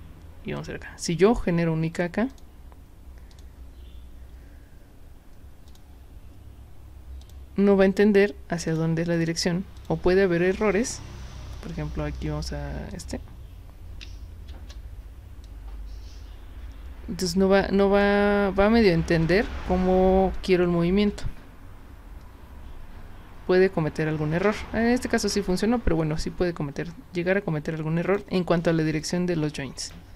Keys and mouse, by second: 0.6 click, 2.3 click, 3.3 click, 5.7 click, 7.2 click, 8.7 click, 9.2 click, 9.8 click, 12.9 click, 14.0 q, 14.5 w, 15.4-18.0 drag, 19.2 click, 20.4-28.2 drag, 29.0 click, 29.8 click.